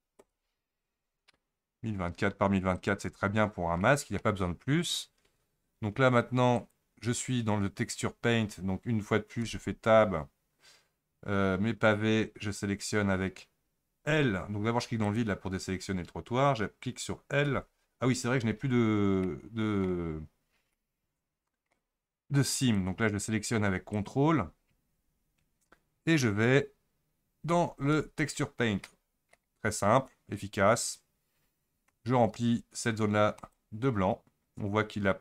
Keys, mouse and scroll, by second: 3.8-4.8 middle drag, 4.8 click, 6.6 click, 9.4 Tab, 15.0 click, 17.4 l, 19.2 scroll up 1, 19.3 middle click, 20.1-20.7 scroll up 4, 20.7-22.6 shift+middle drag, 22.6 click, 23.9 ctrl+click, 27.9 Tab, 28.6-28.9 scroll down 5, 28.9-31.9 middle drag, 33.4-35.2 drag.